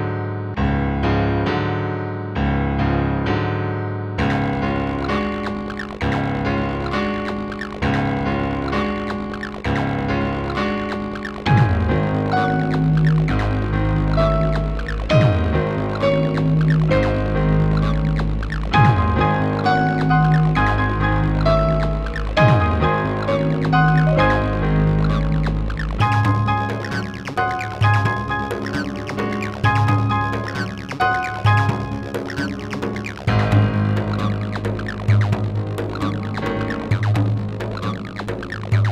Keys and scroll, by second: 8.2 space, 38.1 space.